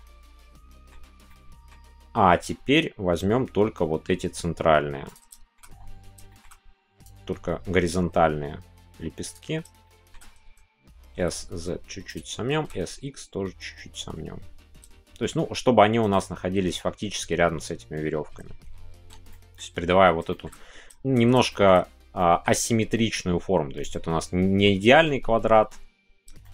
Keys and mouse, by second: 1.2 middle click, 5.4 shift+middle click, 6.2 shift+middle click, 7.1-9.7 drag, 9.8 shift+middle click, 12.1-18.9 drag, 19.0 Tab, 19.3 middle click, 20.3 middle click, 21.5 shift+middle click, 22.1 middle click, 23.8 middle click, 26.4 shift+middle click.